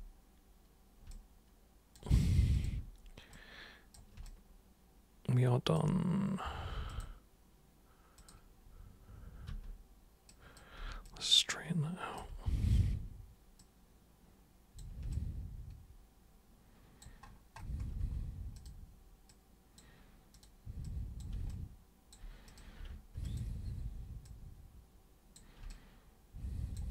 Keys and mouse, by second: 1.1 alt+super+click, 2.5 alt+super+click, 3.3 super+click, 4.2-5.7 alt+super+drag, 6.8 super+click, 8.2 super+click, 9.4 super+r, 10.3 super+click, 11.0-12.2 alt+super+drag, 12.2 super+e, 13.6-14.7 super+drag, 15.1-17.0 alt+super+drag, 18.0 super+w, 18.5 super+click, 19.2 super+click, 20.3 super+click, 20.8 super+click, 21.5-22.1 alt+super+drag, 22.5 super+drag, 23.2 ctrl+shift+super+click, 24.2-25.3 super+drag, 25.6-26.7 alt+super+drag.